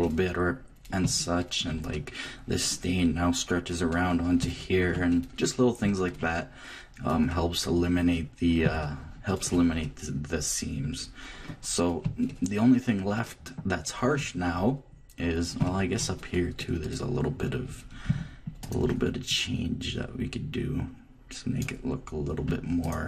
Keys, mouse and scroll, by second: 0.0 middle click, 1.0 Left, 11.4 click, 11.8 middle click, 12.3-15.4 drag, 15.6 Left, 16.5 click, 18.0 click, 18.6-21.3 drag, 22.8-23.0 drag.